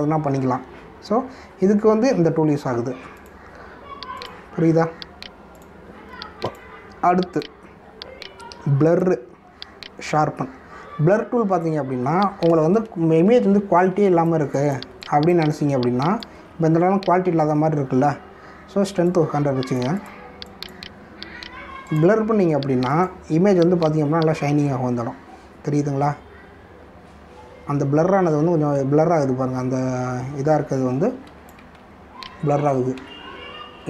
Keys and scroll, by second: 13.7 ctrl+=, 14.6 space.